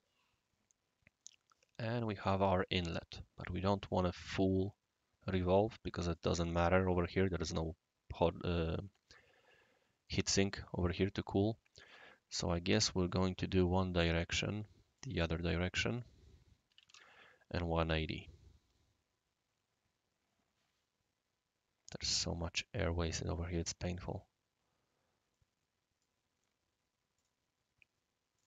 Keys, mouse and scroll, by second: 3.8-4.4 right drag, 5.5-6.2 right drag, 8.5-10.1 right drag, 11.1 right drag, 11.9 click, 13.1 click, 14.9 click, 15.9 click, 16.5 click, 16.7 typing, 16.9 Tab, 17.9-21.9 right drag, 25.3 right click, 27.1 click, 28.3 click.